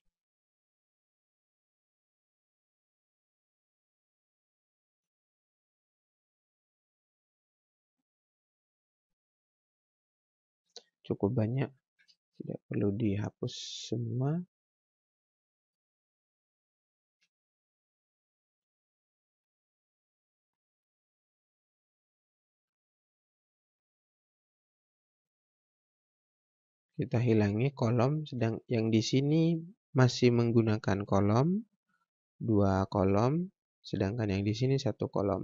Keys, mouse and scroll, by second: 1.3 click, 2.3 Delete, 12.1 ctrl+space, 14.3 right click, 15.4 click, 18.4 click, 33.9 click.